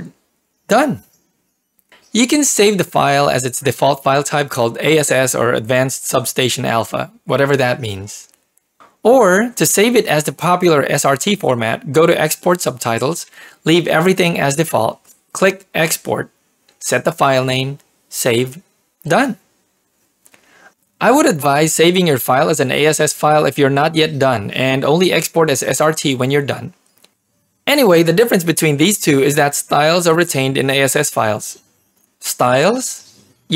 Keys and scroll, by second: 0.7 1, 6.7-8.3 typing, 9.6 Return.